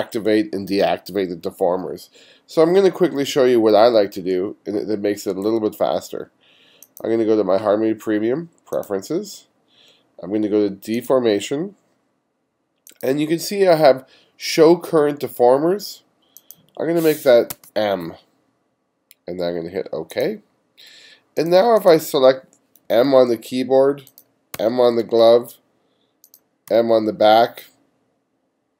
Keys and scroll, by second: 17.6 m, 22.9 m, 24.6 m, 26.7 m.